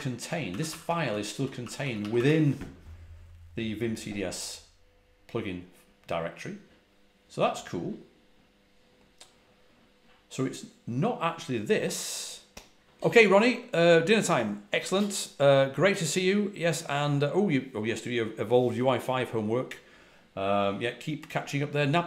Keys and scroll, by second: 0.0-1.8 typing.